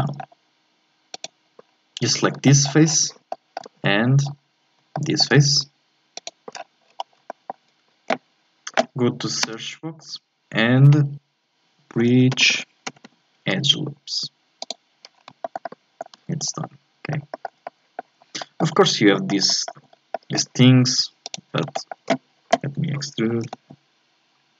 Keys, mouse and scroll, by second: 0.2-1.1 scroll up 1, 1.1 right click, 1.7-2.4 scroll down 4, 2.4 shift+middle click, 2.9-3.3 scroll down 1, 3.3 shift+middle click, 4.2 scroll up 4, 4.9 shift+middle click, 5.3-6.1 scroll up 3, 6.1 shift+right click, 6.5-7.3 scroll down 10, 7.3-9.5 shift+middle drag, 9.5 space, 15.1 scroll down 3, 15.4 shift+scroll up 1, 15.4 shift+middle click, 16.2 z, 16.5 scroll up 2, 16.6-18.2 middle drag, 18.2 scroll up 2, 18.4 shift+middle click, 18.8-19.2 scroll up 1, 19.2 shift+middle click, 19.8 scroll up 4, 20.1-21.2 shift+middle drag, 21.2 right click, 21.7-23.3 shift+middle drag, 23.3 e.